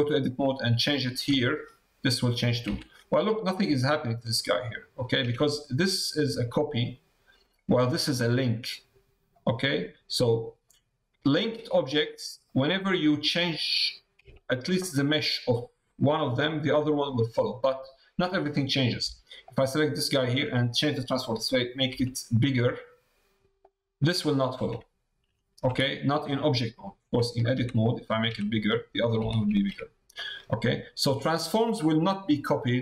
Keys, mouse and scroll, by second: 0.8 click, 5.8 click, 6.3 middle click, 10.4 middle click, 11.8 middle click, 13.1 middle click, 14.3 shift+middle click, 16.0 middle click, 17.0 middle click, 19.4 click, 22.6 s, 27.0 Tab, 27.5 a, 29.7 Tab, 30.1 middle click.